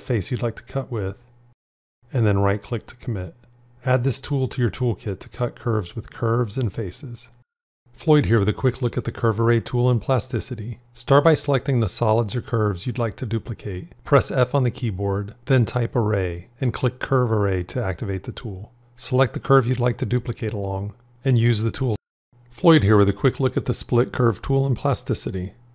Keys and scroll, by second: 13.9 f.